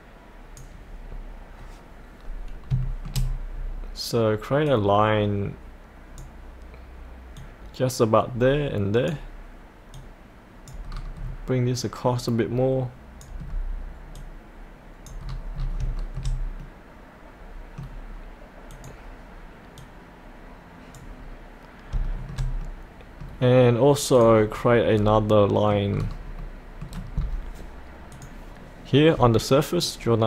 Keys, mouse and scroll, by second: 1.1-2.7 scroll up 1, 2.8 shift+middle click, 3.3-4.7 scroll up 1, 4.7-10.9 drag, 10.9 scroll down 1, 11.8-13.4 drag, 13.4-14.1 scroll down 1, 14.1 click, 15.3 scroll up 1, 16.0 shift+middle click, 18.7 click, 21.2 scroll up 1, 22.0 shift+middle click, 24.2 click, 24.9-25.3 scroll up 1, 25.3 middle click, 26.1-26.4 scroll down 1, 26.4 middle click, 27.1 scroll down 1, 28.1-30.2 drag.